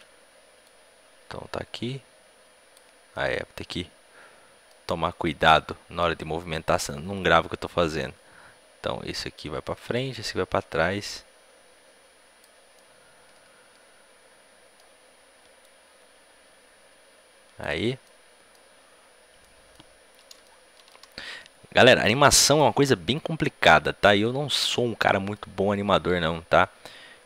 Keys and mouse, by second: 0.5-2.5 drag, 3.0 middle click, 6.1-7.9 drag, 12.7-13.8 middle drag, 13.9 middle click, 15.5-18.0 drag, 18.0-27.2 middle drag.